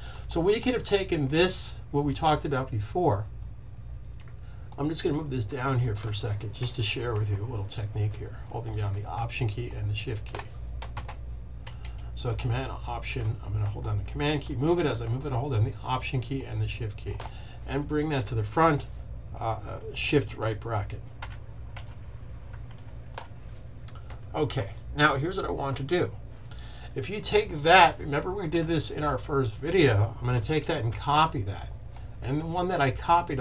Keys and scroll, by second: 10.9 super+z, 19.7 super+z, 21.1 super+], 21.5 super+], 22.6 shift+super+], 30.8 super+c.